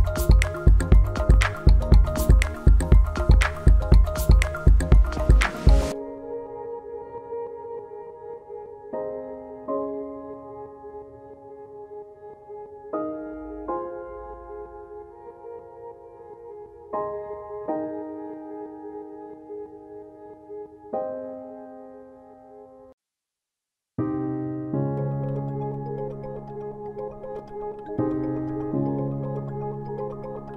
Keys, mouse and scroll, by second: 17.6 scroll up 1, 17.7 scroll down 1, 18.6 click, 20.8 scroll down 1, 20.9 scroll up 1, 22.2 click.